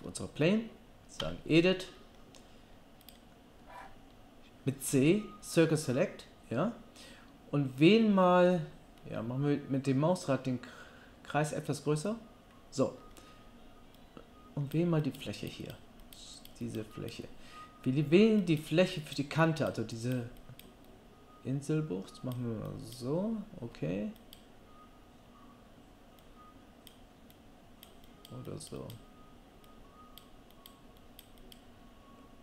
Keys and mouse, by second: 1.2 Tab, 4.9 c.